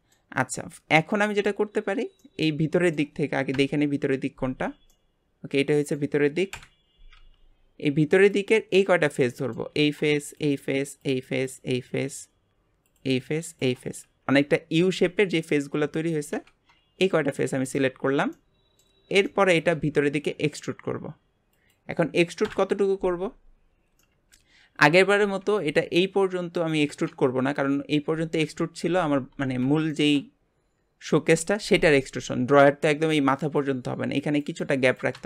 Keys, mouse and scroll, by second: 1.1-2.2 drag, 2.2-3.5 middle drag, 3.5 KP_Divide, 4.5 Tab, 4.9-6.5 middle drag, 6.5 KP_Divide, 7.1 Tab, 8.2 click, 9.2 middle click, 9.7-10.2 scroll up 1, 10.2 shift+click, 11.0 shift+click, 11.4 shift+click, 12.8 shift+click, 13.5 shift+click, 17.7 shift+click, 18.0 scroll down 1, 18.3 middle click, 18.9 scroll down 2, 19.2 shift+middle click, 19.7 e, 22.4 KP_Divide, 24.0 middle click, 24.6-24.9 scroll up 3, 27.5 KP_1, 28.4 KP_3, 29.4 alt+z, 29.9-32.3 shift+middle drag, 32.3-32.6 scroll up 1.